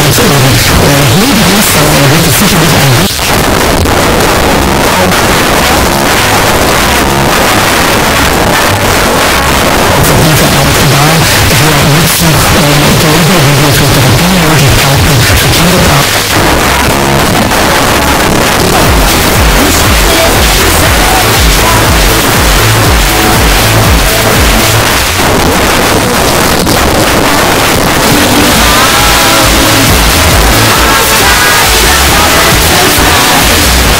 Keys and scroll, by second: 3.1 Page_Down, 16.0 Page_Down, 24.9 Page_Down, 33.9 space.